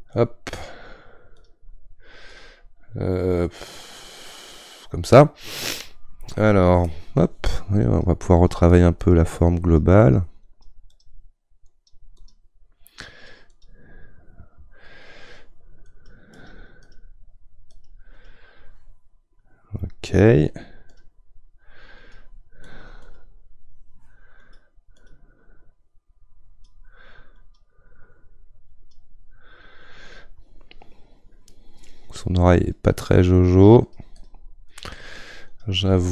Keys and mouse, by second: 0.7 click, 1.5 click, 2.4 click, 3.6 click, 4.3 click, 7.8-36.1 drag.